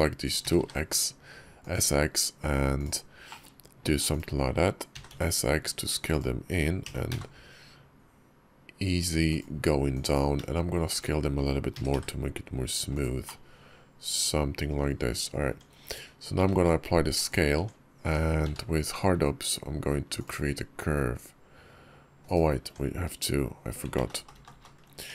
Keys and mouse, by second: 0.3 s, 3.1 click, 3.2 middle click, 4.8 s, 6.7 e, 9.8 click, 11.6 s, 13.1-14.6 drag, 15.3 Tab, 16.3 ctrl+a, 17.4 Tab, 17.9 Tab, 18.3 q, 22.5 Tab, 23.9 ctrl+z, 24.1 ctrl+z, 24.3 ctrl+z, 24.4 ctrl+z, 24.9 Tab.